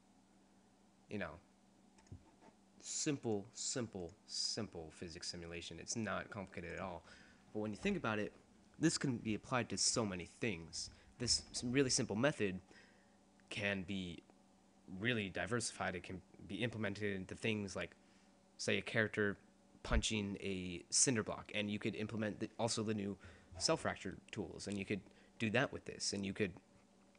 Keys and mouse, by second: 2.0-6.0 drag, 6.8 click, 7.6-8.8 drag.